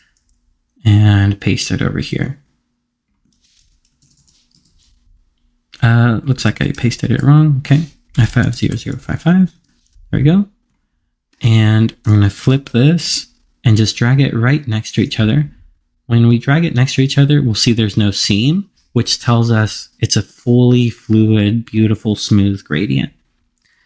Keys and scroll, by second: 3.3 super+v.